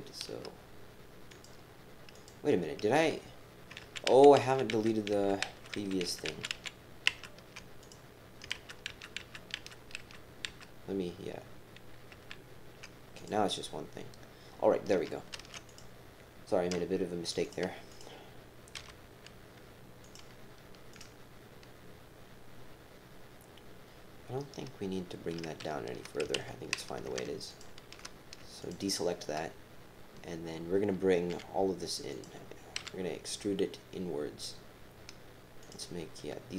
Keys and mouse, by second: 1.3 click, 2.1 click, 3.8 ctrl+z, 4.1 ctrl+z, 4.4 ctrl+z, 4.7 ctrl+z, 5.1 ctrl+z, 5.4 ctrl+z, 5.8 ctrl+z, 6.0 ctrl+z, 6.3 ctrl+z, 6.7 ctrl+z, 7.1 ctrl+z, 7.8 click, 8.5 ctrl+z, 8.9 ctrl+z, 9.2 ctrl+z, 9.6 ctrl+z, 10.0 ctrl+z, 10.7 ctrl+z, 12.1 ctrl+z, 13.2 click, 13.3 typing, 15.3 ctrl+r, 17.9 click, 18.8 g, 20.9 click, 26.5 alt+shift+x, 27.5 alt+shift+click, 28.6 shift+click, 31.3 e, 32.8 s.